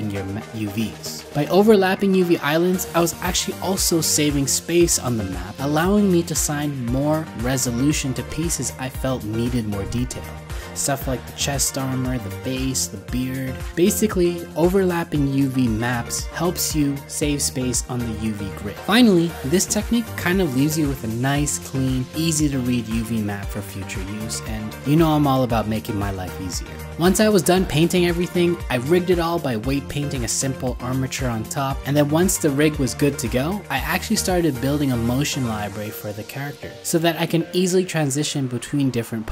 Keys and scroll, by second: 1.7 ctrl+c, 2.4 ctrl+v, 14.4 ctrl+c, 15.5 ctrl+v, 28.2 ctrl+z, 30.7 alt+w, 32.2 ctrl+z, 32.7 alt+w, 37.7 ctrl+z, 38.9 ctrl+z, 39.2 ctrl+z.